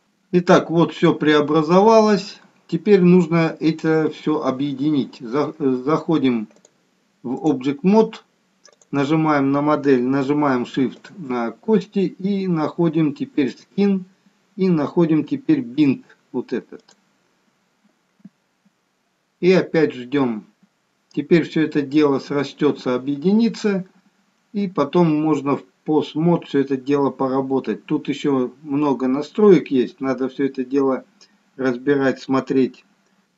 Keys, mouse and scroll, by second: 1.4-2.2 scroll up 2, 2.2 scroll down 1, 6.5 click, 8.8 click, 11.1 shift+click, 13.5 click, 16.9 click.